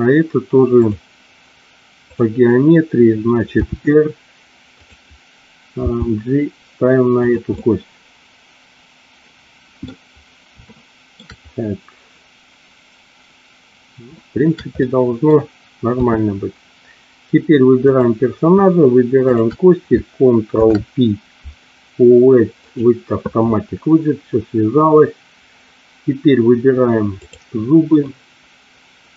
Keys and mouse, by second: 0.7-2.1 drag, 3.5 r, 4.8 click, 5.9 g, 7.3 click, 7.6-9.8 middle drag, 10.7 shift+middle click, 14.1 shift+middle click, 14.7 middle click, 15.8 KP_3, 17.7 click, 19.2 shift+click, 20.5 ctrl+p, 27.2 click.